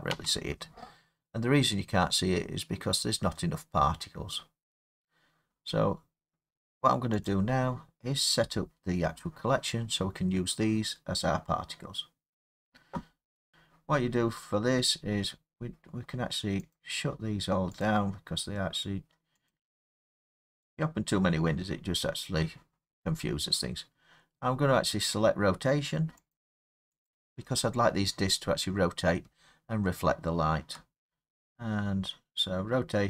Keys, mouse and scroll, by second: 0.1 space, 1.9 scroll, 3.1-4.7 scroll, 5.3-5.6 scroll, 7.3 click, 8.4 middle click, 8.4 middle click, 8.5-8.8 middle click, 8.7 middle click, 8.8 middle click, 13.5 middle click, 15.0 scroll, 16.8 click, 17.9 click, 26.4 click, 27.1 click.